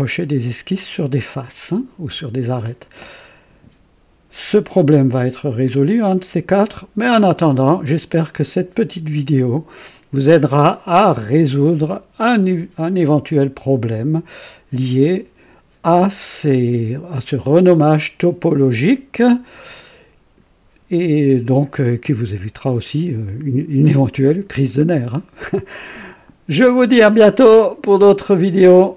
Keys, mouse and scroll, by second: 0.1 typing, 16.4 click, 17.4 click, 18.7 click, 22.8-24.5 right drag, 26.9-28.9 drag.